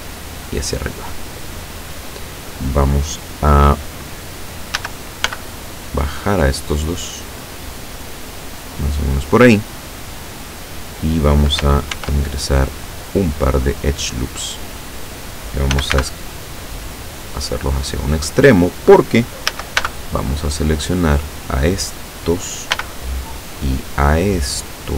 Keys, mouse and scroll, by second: 4.8 a, 5.3 b, 6.0-7.0 drag, 7.4-9.4 drag, 12.0 ctrl+r, 13.1 scroll up 2, 13.6 click, 15.8 s, 16.0 x, 18.2 click, 19.5 a, 19.8 b, 20.6-21.6 drag, 22.8 b, 23.7-24.8 drag.